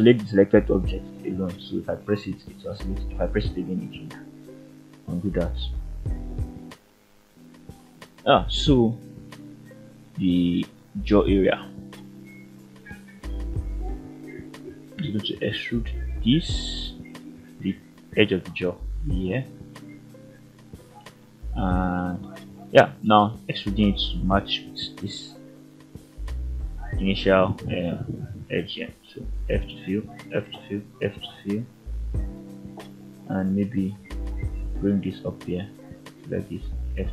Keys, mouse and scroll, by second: 0.1 shift+middle drag, 0.7 Tab, 1.1-1.4 scroll down 2, 1.4-2.4 middle drag, 2.6-3.1 scroll up 1, 3.4 click, 3.4 scroll up 1, 3.9 g, 4.5 click, 5.2 click, 5.5 g, 6.0 click, 6.6 click, 7.2 shift+middle click, 7.6 middle click, 8.1 scroll up 1, 9.0 ctrl+click, 9.6 e, 10.9 click, 11.7 click, 12.0 g, 12.9 click, 13.4 click, 13.8 g, 14.6 click, 15.2 click, 15.5 g, 16.0 click, 16.6 click, 16.9 g, 17.5 click, 18.5 g, 19.4 click, 20.1 click, 20.6 g, 21.5 right click, 22.0-22.8 middle drag, 23.8-24.6 ctrl+right drag, 28.5 click, 29.5 shift+click, 30.0 f, 31.6 f, 32.1 shift+middle click, 32.7 middle click, 34.0 click, 35.3 ctrl+right click, 36.4 ctrl+click.